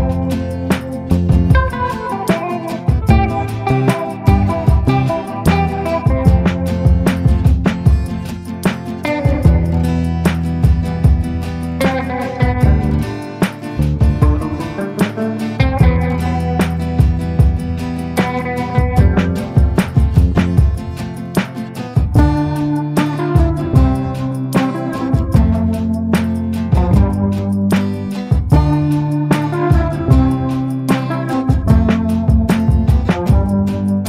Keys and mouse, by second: 0.0-1.5 drag, 1.5 [, 1.6 [, 1.7 click, 2.5 ctrl+z, 2.7 ctrl+z, 3.3 click, 4.0 ctrl+z, 6.4 middle click, 7.0 middle click, 7.6 middle click, 8.3-9.5 middle drag, 9.5 click, 9.5 ], 10.1 click, 10.1 ], 10.8 click, 10.8 ], 11.2 ctrl+z, 11.4 ], 11.6 click, 12.0 ctrl+z, 12.4 [, 12.4 click, 14.2 middle click, 15.1 middle click, 15.3 middle click, 16.4 middle click, 16.8-18.9 shift+middle drag, 19.2 shift+middle click, 21.2 click, 21.9 click, 22.9 click, 23.5 click, 24.3 click, 25.7 ], 26.0 ], 26.1 click, 27.1 click, 28.1 ctrl+z, 28.3 click, 29.0 click, 29.7 click, 30.0 click, 30.2 click, 31.2 [, 31.5 [, 31.6 click, 31.6 [, 32.4 ctrl+z, 32.5 ], 32.7 click.